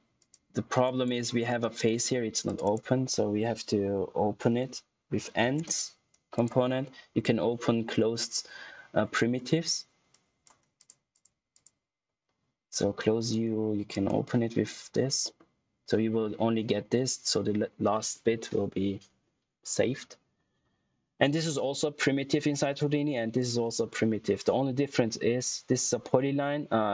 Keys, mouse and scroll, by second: 1.2-2.4 scroll up 1, 2.4 click, 2.6 right click, 4.9-5.8 typing, 6.3 click, 6.6 scroll up 1, 10.2 click, 15.1 middle click, 23.3 click, 25.7 click.